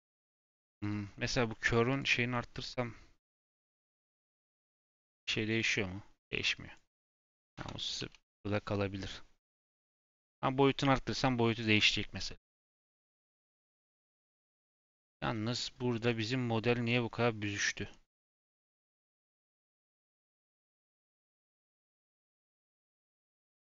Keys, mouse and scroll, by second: 1.9 click, 3.3 click, 4.4-9.7 drag, 9.7 s, 14.7 middle click, 15.3 scroll up 1, 15.5-19.2 middle drag, 20.7 click, 21.4 click, 22.1 click, 22.5 click, 22.8 click, 23.3 click, 23.6 click.